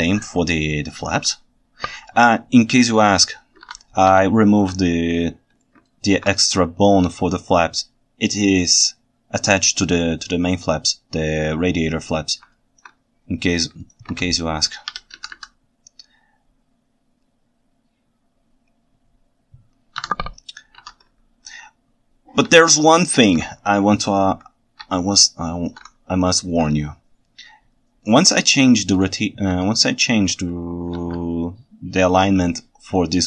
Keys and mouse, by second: 1.7 shift+h, 3.3 ctrl+z, 3.7 alt+a, 4.2-4.7 ctrl+shift+middle drag, 5.9 ctrl+alt+right drag, 12.6 ctrl+alt+right drag, 14.2 ctrl+Tab, 15.3 x, 22.7-23.3 ctrl+shift+right drag, 23.7-24.1 ctrl+alt+right drag, 25.0-25.7 ctrl+shift+right drag, 26.3 ctrl+alt+drag, 26.5 ctrl+alt+right click, 31.0 alt+a.